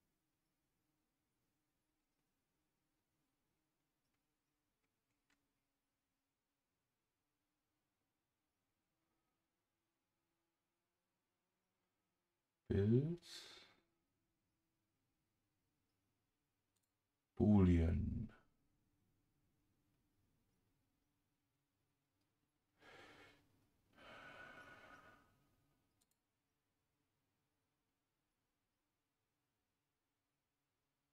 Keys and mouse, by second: 26.0 click.